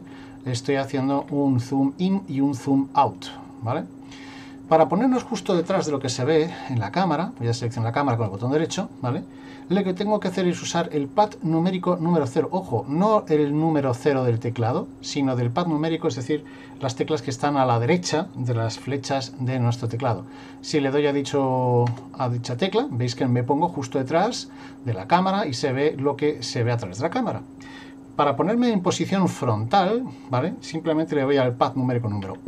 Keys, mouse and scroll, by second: 0.4-0.9 scroll down 2, 0.9 scroll up 2, 1.2-2.3 scroll down 2, 3.1 middle click, 8.3 right click, 21.9 KP_0, 32.2 KP_1.